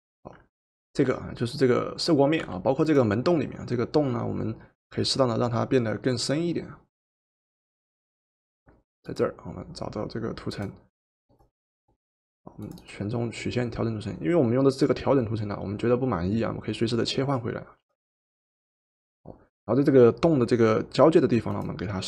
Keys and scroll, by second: 2.5 v.